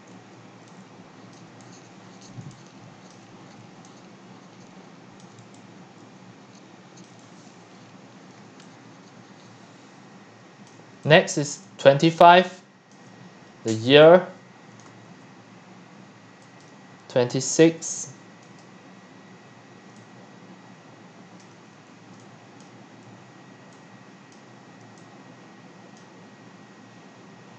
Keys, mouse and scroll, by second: 0.0-7.2 typing, 1.3 drag, 3.1 click, 3.5-3.8 scroll, 5.2 drag, 9.0-14.9 typing, 11.3 click, 12.0 click, 12.9 click, 13.3 middle click, 14.8 drag, 16.6-19.9 drag, 19.9-23.0 typing, 21.4-21.7 drag, 22.6-23.0 drag, 24.3-24.8 drag, 24.8-27.5 c.